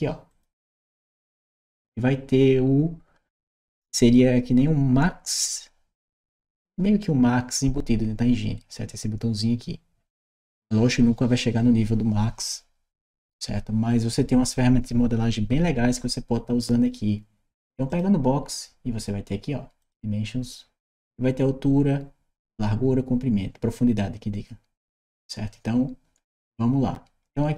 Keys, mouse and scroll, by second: 0.0 click, 17.7 click, 19.6 click.